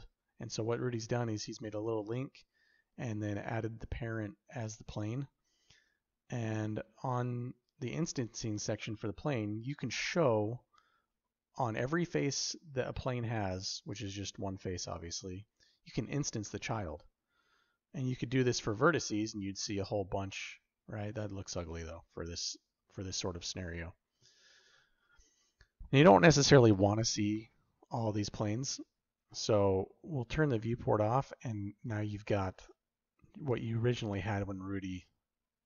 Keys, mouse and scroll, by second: 18.4 click, 24.1 click, 30.5 click.